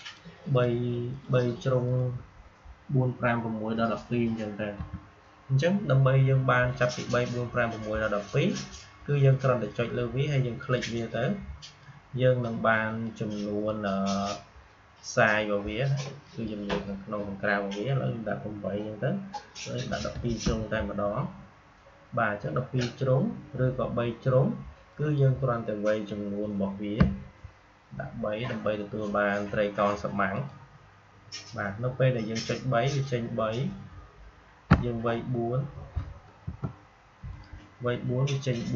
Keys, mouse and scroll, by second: 4.7 Delete, 9.2-16.1 drag, 24.8 click, 30.2 click, 32.8 click, 36.4 BackSpace, 37.2 click.